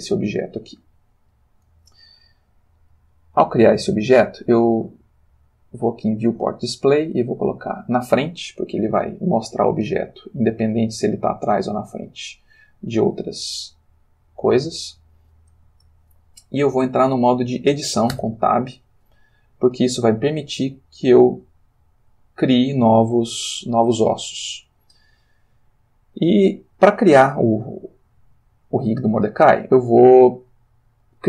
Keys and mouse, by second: 1.2 Escape, 6.2 click, 7.4 click, 8.9-12.8 middle drag, 14.6 click, 18.1 Tab, 19.7 click, 20.4 g, 22.0 click, 22.5 click, 27.5 click, 28.2 j, 28.3 g, 30.9 click.